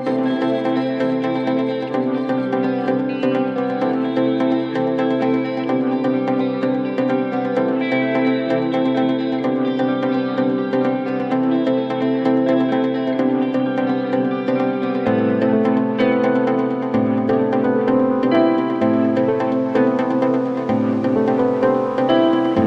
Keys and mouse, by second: 2.1 1, 3.2 r, 5.0-6.2 drag, 6.4 alt+x, 8.0 click, 9.9 alt+middle click, 11.0 4, 11.3 click, 13.2-14.7 drag, 16.4 alt+click, 17.2 click, 18.1 alt+click, 18.5 alt+click, 18.8 click, 19.1 1, 19.6 middle click, 19.8 click, 20.4 r, 21.5 click, 22.1 click, 22.4 click.